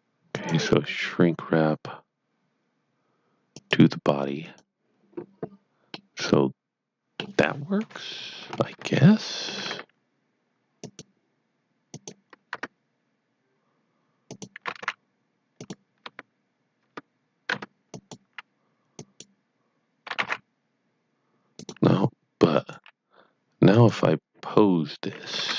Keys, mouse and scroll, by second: 0.2 click, 3.5 click, 5.9 middle click, 7.8 KP_3, 8.4 scroll up 1, 8.9 shift+middle click, 10.7 click, 12.5 Tab, 14.2 click, 14.7 g, 15.7 click, 16.0 Tab, 16.9 Tab, 17.9 click, 18.9 click, 20.0 g, 21.5 right click, 22.5 click, 22.6 click, 23.7 click.